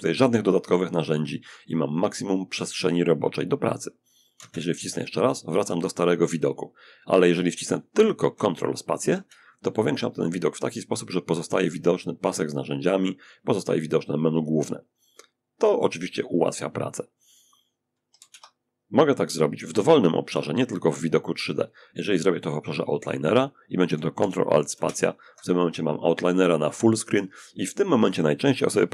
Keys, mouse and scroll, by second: 3.5 ctrl+alt+space, 8.3 ctrl+space, 17.4 ctrl+space, 23.9 ctrl+alt+space.